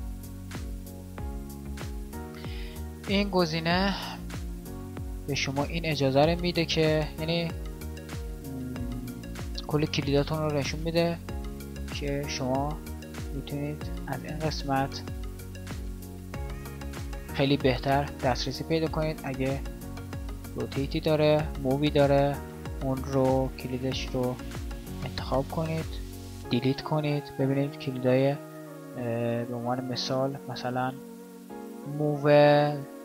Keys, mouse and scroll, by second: 24.1 a.